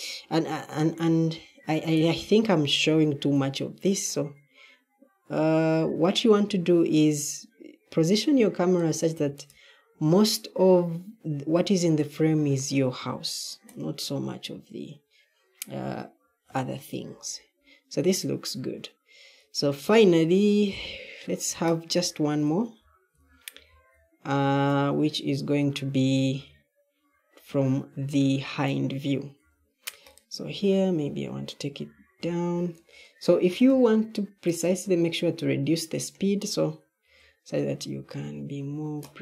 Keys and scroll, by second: 19.7-26.2 typing, 29.3 e, 31.7 q, 37.0-38.6 typing.